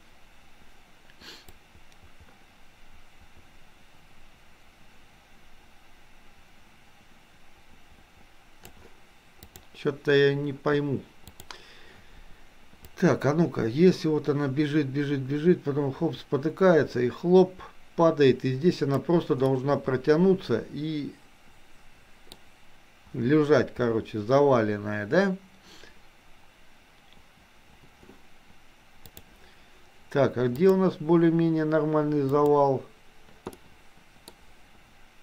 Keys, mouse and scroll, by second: 1.6-8.8 drag, 9.4 click, 11.3 click, 12.9-19.1 drag, 19.6-22.3 middle drag, 29.2 click, 30.7 click, 32.4 click, 33.7-34.3 middle drag.